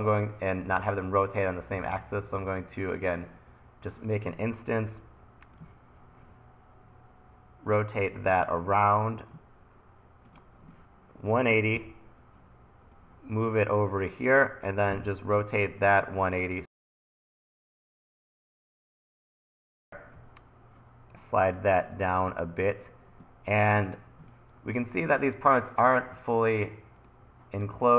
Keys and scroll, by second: 4.9 r, 11.8 e, 15.0 r, 20.2 e.